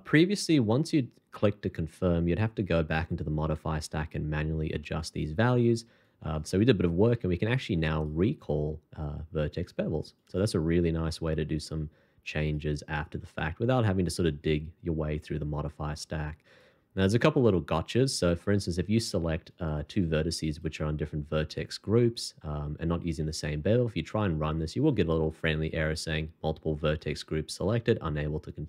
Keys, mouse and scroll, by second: 7.1 shift+2, 11.5 shift+2, 20.4 shift+click, 23.0 shift+2.